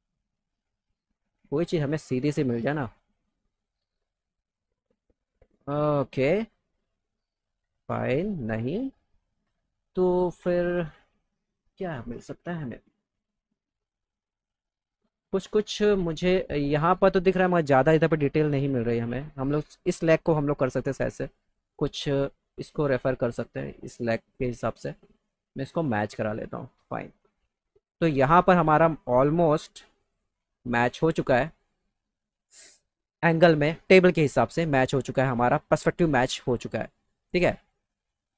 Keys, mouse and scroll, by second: 13.7 click, 15.3 click, 15.7 right click, 19.4-20.0 drag, 21.5-24.1 drag, 25.1-26.2 drag, 29.8-31.0 drag.